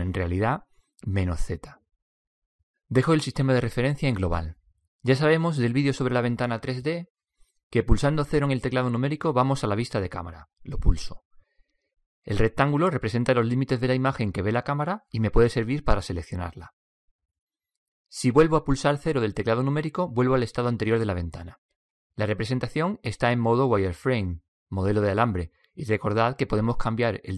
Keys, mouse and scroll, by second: 0.6 click, 5.0-6.0 drag, 6.4-7.0 drag, 11.3 KP_0, 13.9-18.9 right drag, 20.8 KP_0.